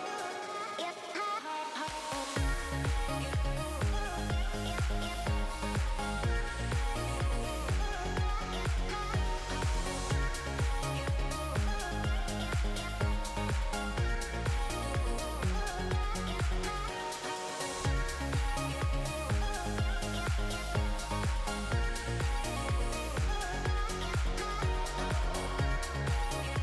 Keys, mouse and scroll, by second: 2.6-3.1 scroll up 3, 3.1 alt+a, 3.5 shift+middle click, 3.6 middle click, 4.3 scroll up 1, 4.4 shift+middle click, 5.3 click, 5.8 Tab, 6.7 2, 7.1 click, 7.7 3, 8.3 click, 8.8 middle click, 9.5 click, 11.1 alt+a, 11.3-11.8 scroll down 4, 11.7 Tab, 11.8 middle click, 12.2 alt+a, 14.0 scroll up 2, 14.1 middle click, 15.6 shift+middle click, 15.7 shift+middle click, 16.0 middle click, 16.0 scroll up 1, 19.4 middle click, 19.7 scroll up 2, 19.9 shift+middle click, 20.4-20.7 scroll up 2, 20.6 middle click, 20.8 shift+middle click, 22.4 middle click, 25.6 click, 26.2 Tab, 26.4 middle click.